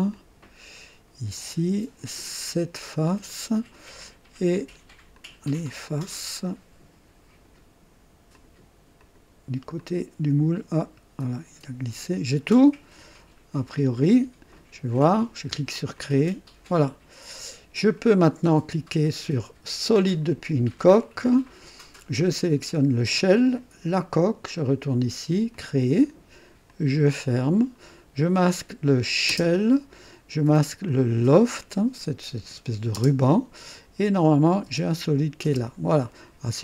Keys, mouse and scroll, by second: 0.1 ctrl+click, 1.3 ctrl+click, 2.7 ctrl+click, 3.3 ctrl+click, 4.5 ctrl+click, 5.1 ctrl+click, 5.8 ctrl+click, 6.4-7.6 ctrl+drag, 8.3 ctrl+click, 9.0 ctrl+click, 9.8 ctrl+click, 10.7 ctrl+click, 11.2-13.9 ctrl+drag, 14.9 click, 15.9 click, 19.8 click, 21.2 click, 22.0-22.3 scroll down 1, 23.5 click, 24.6 click, 25.5 click, 26.7 click, 27.6-28.0 scroll down 1, 28.9 click, 29.3 space, 30.8 click, 32.9 typing, 34.1 click, 34.6-35.4 typing, 35.9-36.6 drag.